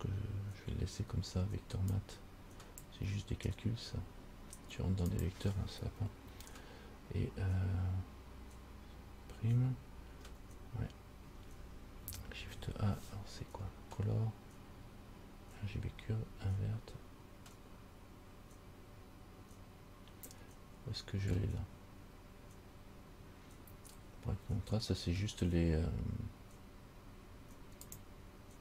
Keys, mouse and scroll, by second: 10.3 Delete, 12.6 shift+a.